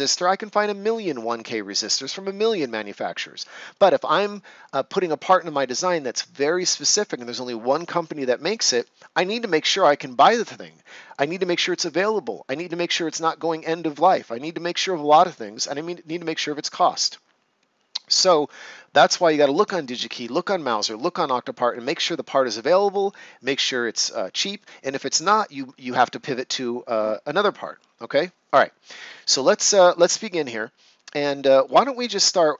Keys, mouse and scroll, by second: 28.9 ctrl+scroll down 1, 29.4 right click, 32.2 ctrl+scroll down 1.